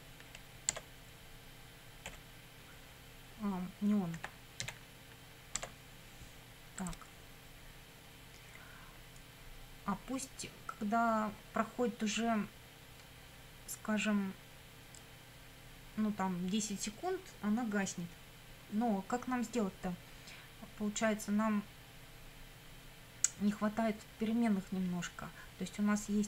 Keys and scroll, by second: 0.7 Tab, 2.1 ., 4.2 n, 4.6 e, 5.6 Tab.